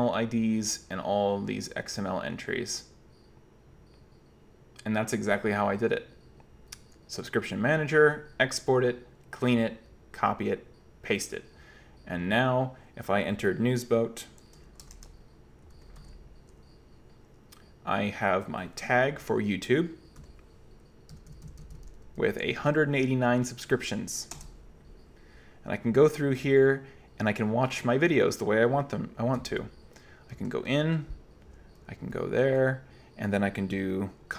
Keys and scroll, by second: 14.4-15.3 typing, 15.8 super+q, 16.0 super+n, 20.3-22.6 typing, 24.4 Return, 29.4 j, 30.4 l, 31.5 j, 32.2 l, 34.2-34.3 typing.